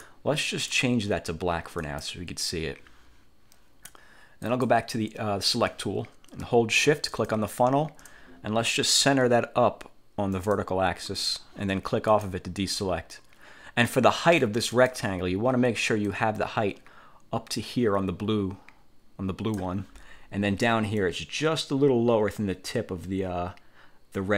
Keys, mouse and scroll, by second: 0.1 click, 1.9 click, 4.5 click, 7.2 shift+click, 10.5 click, 12.2 click, 13.9 middle click, 14.8 click, 16.2-19.9 drag, 21.1-24.3 drag.